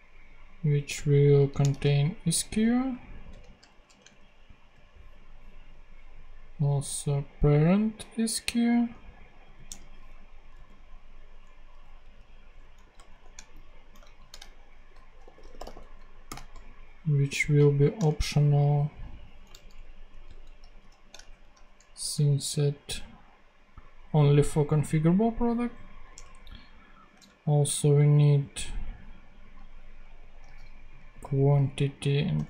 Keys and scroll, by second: 1.2 shift+Right, 1.6 shift+super+x, 2.4 super+v, 3.2 super+Return, 3.9 super+Return, 4.0 super+Tab, 9.4 super+c, 9.6 super+Tab, 10.4 super+v, 11.9 alt+Left, 12.6 alt+Right, 13.0 alt+shift+;, 13.4 shift+Right, 14.5 alt+shift+s, 14.9-16.2 typing, 17.6 shift+., 18.1 shift+super+Right, 18.9 super+Right, 20.1 alt+shift+Left, 20.7 shift+/, 21.2 shift+super+Right, 21.9 super+Return, 22.4 Return, 26.0 super+Tab, 30.3 super+x, 31.0 super+v, 32.2 BackSpace.